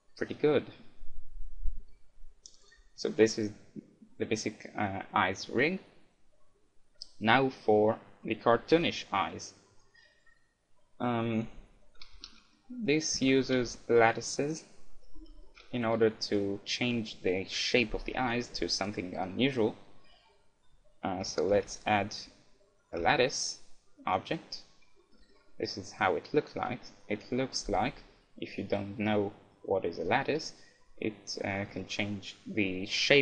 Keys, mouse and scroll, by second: 2.7-3.7 right drag, 4.8-6.6 middle drag, 7.9-9.6 middle drag, 8.7 KP_1, 11.6-14.4 middle drag, 13.2 a, 13.6 KP_1, 14.5-16.2 right drag, 15.2 a, 15.4-18.2 middle drag, 18.3-20.1 right drag, 21.2 a, 23.0 shift+a, 25.0-27.2 middle drag, 29.6-31.3 middle drag.